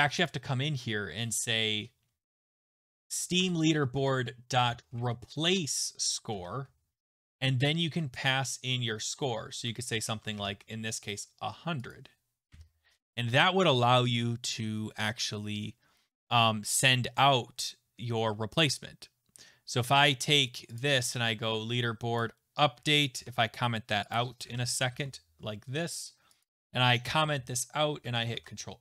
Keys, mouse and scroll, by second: 0.2 click, 1.7 Return, 2.3-8.3 typing, 3.4 Tab, 9.6-11.2 typing, 11.9 click, 12.5 ;, 20.8 click, 22.2 click, 23.1 ctrl+c, 24.1 click, 24.5 ctrl+v, 24.9 =, 26.4 click, 27.0 /, 27.2 /, 28.0 ctrl+s, 28.3 alt+Tab.